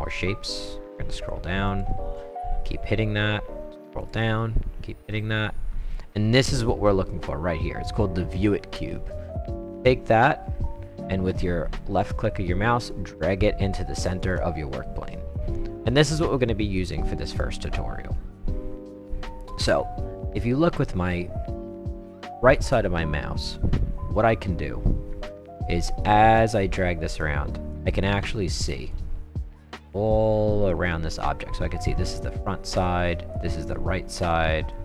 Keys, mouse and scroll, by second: 0.3 middle click, 0.8 middle click, 1.7 click, 2.4 middle click, 2.9 middle click, 2.9 middle click, 4.0 click, 4.5-5.5 middle drag, 9.1-13.7 drag, 14.2 click, 16.7-19.0 right drag, 25.2-26.6 right drag, 27.1-27.7 right drag, 28.2-28.9 right drag, 29.4-29.8 right drag, 30.2-30.7 right drag, 31.1-33.3 right drag, 33.7-34.7 right drag.